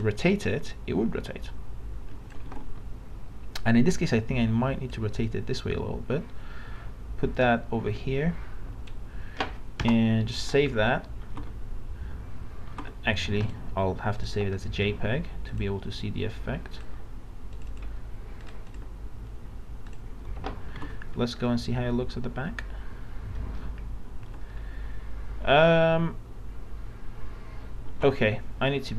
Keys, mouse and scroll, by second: 0.0-2.3 drag, 4.1-8.9 drag, 9.8 Return, 10.4 ctrl+s, 13.4 click, 21.0 alt+Tab, 21.5-24.3 middle drag, 27.9 alt+Tab.